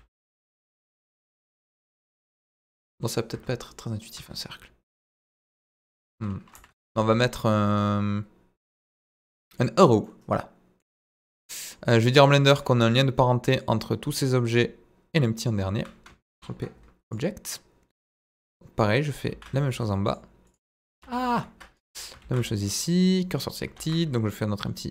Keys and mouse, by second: 0.0 KP_9, 0.1 KP_0, 2.5 Return, 3.3 Tab, 3.6-4.0 middle drag, 4.1 Tab, 6.5 Delete, 6.7 shift+a, 10.0-10.8 middle drag, 11.4-11.7 middle drag, 16.3 ctrl+p, 19.3 shift+s, 21.0 ctrl+z, 21.3 ctrl+z, 22.2 shift+s, 23.7 shift+a.